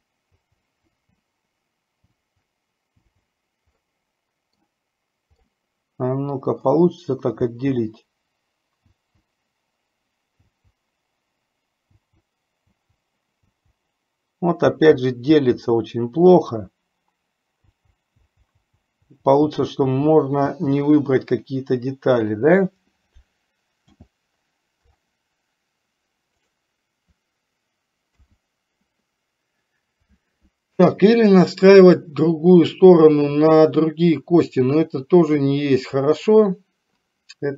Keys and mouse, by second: 0.0-1.1 typing, 2.2 l, 3.2 l, 4.0 middle click, 5.6-6.9 middle drag, 7.6 l, 9.1 l, 10.6 l, 12.1 l, 12.9 l, 13.8 l, 15.0 l, 15.5 l, 18.0-20.9 typing, 23.9 c, 28.4 KP_1.